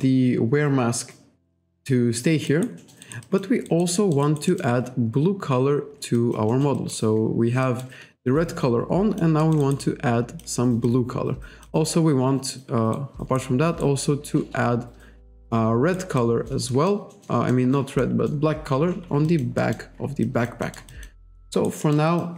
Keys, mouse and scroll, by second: 2.5 alt+right click, 2.8 alt+middle click, 3.3 alt+click, 3.7 alt+right click, 4.0 alt+middle click, 4.3 alt+right click, 6.2 alt+click, 6.5 alt+middle click, 7.7 alt+middle click, 8.3 alt+right click, 8.5 alt+click, 9.4 alt+middle click, 9.5 alt+scroll up 1, 10.9 alt+click, 12.5-12.9 scroll down 1, 13.0 right click, 13.9 right click, 16.2 middle click, 16.7 middle click, 17.1 middle click, 17.5 middle click, 18.0 middle click, 19.3 alt+click, 19.6 alt+middle click, 20.3 alt+click, 20.7 alt+middle click, 21.3 alt+middle click, 21.6 alt+right click, 21.9 alt+middle click.